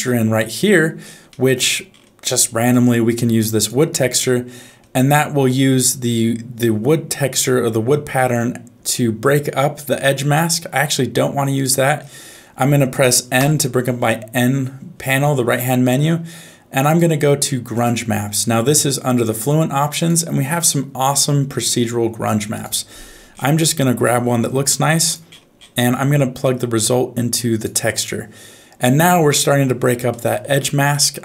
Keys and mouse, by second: 1.2 middle click, 2.7 click, 10.9 click, 12.3 middle click, 13.4 n, 16.9 click, 20.0-22.7 drag, 24.1 middle click, 24.5 g, 26.4-27.7 drag, 30.1 middle click, 30.9 middle click.